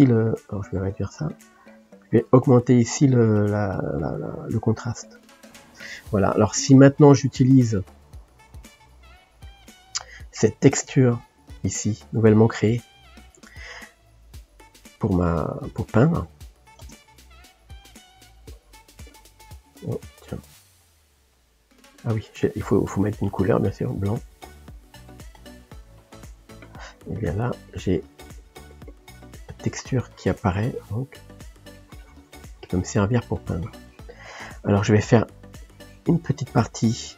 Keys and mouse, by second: 5.2-10.4 shift+drag, 13.3-16.9 drag, 16.9 ctrl+space, 17.5 ctrl+middle click, 18.0-19.5 drag, 19.5-24.0 middle drag, 24.0 click, 27.2 click, 27.7 click, 28.0 click, 28.2 click, 28.6 click, 29.1 middle click, 29.7-31.1 drag, 31.1 middle click, 31.6-33.0 drag, 33.0 middle click, 33.5-36.7 drag, 36.7-37.1 middle drag.